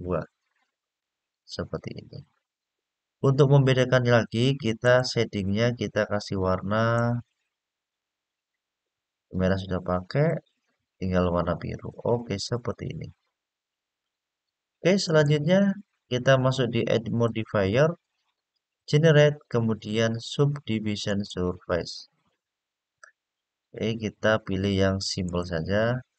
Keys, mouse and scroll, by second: 2.5 scroll down 1, 4.6 click, 5.1-5.6 scroll down 3, 6.7 click, 7.6 click, 10.0 click, 12.3 click, 14.8 click, 17.0-21.1 drag, 25.0 click.